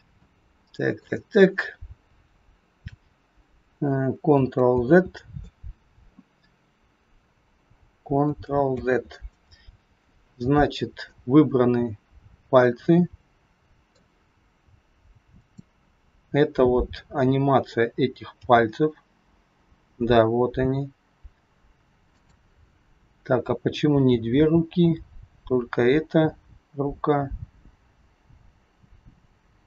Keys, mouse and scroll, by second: 0.2 middle click, 4.8 ctrl+z, 8.6 ctrl+z, 11.2 middle click, 15.3 click, 18.4 g, 24.3 g.